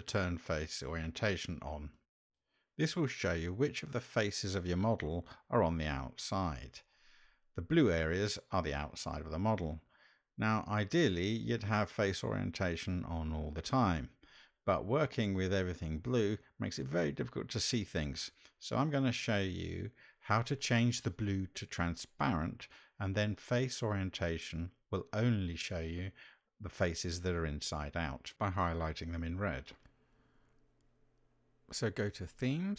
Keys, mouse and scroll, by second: 28.9-31.2 drag.